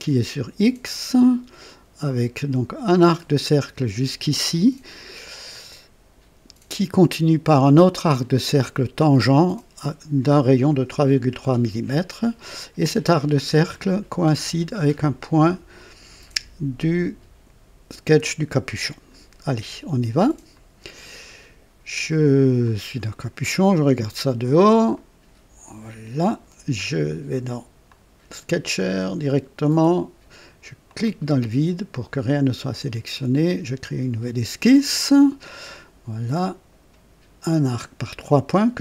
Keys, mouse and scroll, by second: 20.5 click, 22.6 click, 24.1 click, 25.0-26.2 right drag, 27.9 click, 29.0 click, 30.8 click, 32.6 click, 34.7 click, 37.7 click.